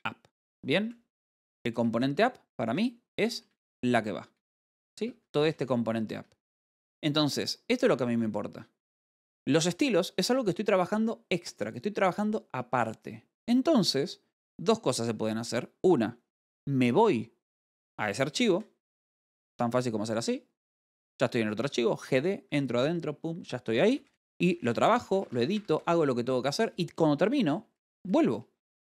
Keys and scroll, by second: 0.9-2.9 typing, 5.0 v, 7.8 Escape, 7.8 f, 18.9 g, 19.4 l, 20.0 d, 24.2-26.0 typing.